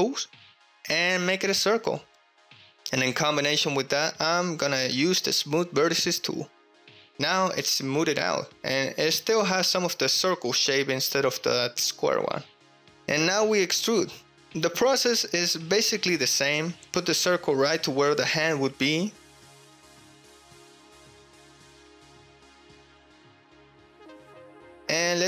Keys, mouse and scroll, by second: 0.0-1.4 drag, 1.4 middle click, 1.9 middle click, 2.2-4.2 drag, 4.9-6.0 drag, 6.6 KP_Enter, 6.8 KP_Enter, 6.9 KP_3, 7.7 KP_1, 7.7 g, 8.0 x, 9.9 click, 10.2 middle click, 10.3-11.3 drag, 11.8 middle click, 11.9 click, 12.4 ctrl+click, 12.5 ctrl+middle click, 12.8 KP_3, 12.9 KP_1, 13.6 shift+click, 14.1 e, 15.5 click, 17.1 g, 18.1 s, 19.0 click, 19.9 s, 20.7 0, 21.1 x, 21.7 Return, 22.5 s, 23.4 click, 23.8 g.